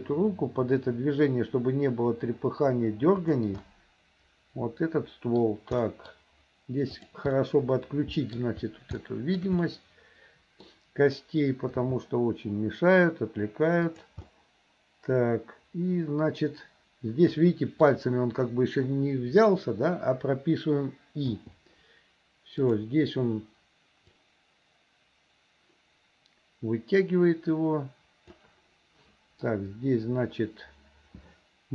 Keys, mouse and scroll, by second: 3.7-4.9 middle drag, 5.0 scroll up 1, 5.1 middle click, 5.8 scroll up 1, 7.0 click, 7.3-8.4 middle drag, 9.0 shift+scroll up 1, 9.1 shift+middle click, 9.4 shift+scroll down 1, 9.7-10.7 middle drag, 11.9 g, 14.3-17.9 middle drag, 21.4 i, 22.7 click, 24.2-28.5 drag.